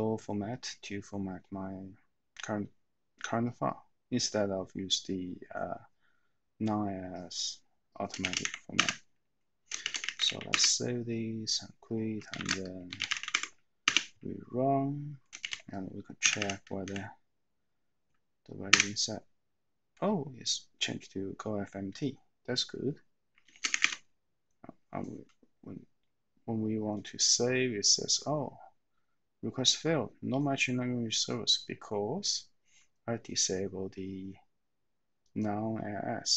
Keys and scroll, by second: 8.3 :, 8.7 Return, 9.5-10.7 typing, 12.2-13.8 typing, 13.8 Return, 16.1-16.8 typing, 18.8 Return, 23.8 Return, 23.8 w.